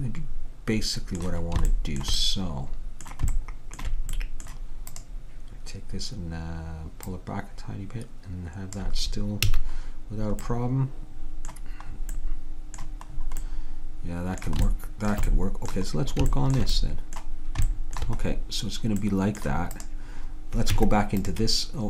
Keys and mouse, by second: 1.8-4.4 middle drag, 5.0-6.7 drag, 7.2-9.0 drag, 9.6 a, 11.2-13.9 middle drag, 19.8 right click, 20.8 Tab.